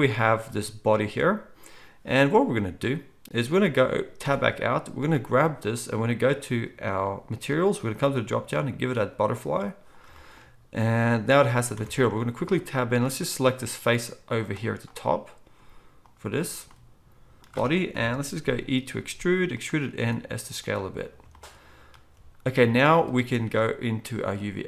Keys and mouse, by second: 4.2 Tab, 10.0-14.7 shift+drag, 10.0-18.9 shift+middle drag, 11.7 Tab, 17.9 KP_1, 18.9 e, 19.9-21.3 middle drag, 19.9 s.